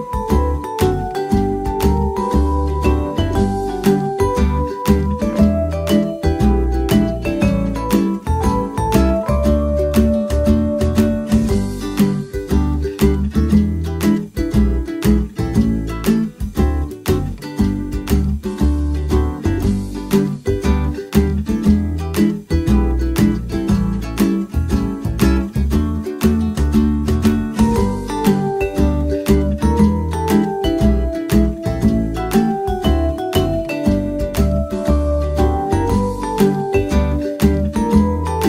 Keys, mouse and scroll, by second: 1.3 click, 1.5-2.0 middle drag, 2.0-3.5 drag, 3.7-5.4 drag, 5.4 middle click, 5.5 s, 7.0-8.7 drag, 8.7-9.3 middle drag, 9.9 shift+a, 14.2-14.8 middle drag, 14.8-17.9 drag, 17.1 Tab, 17.5 a, 17.9 a, 19.0 s, 21.9-23.8 right drag, 23.3-24.9 drag, 25.1 right click, 26.6 click, 27.3 a, 27.6 a, 27.9 w, 29.0 w, 32.6 Tab, 34.0-35.6 drag, 36.0 click, 36.9-38.4 middle drag.